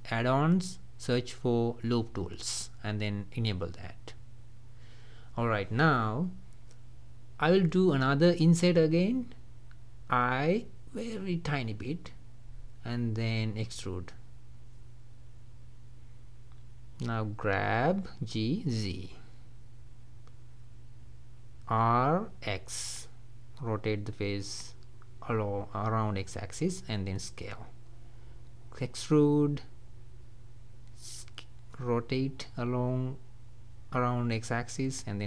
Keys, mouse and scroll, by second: 5.2-9.9 middle drag, 9.9 i, 12.7-15.4 middle drag, 15.4 e, 16.5-17.6 middle drag, 17.6 g, 19.6-21.5 middle drag, 21.5 r, 25.6 s, 28.0 e, 30.3 r, 32.5 s, 34.7 e.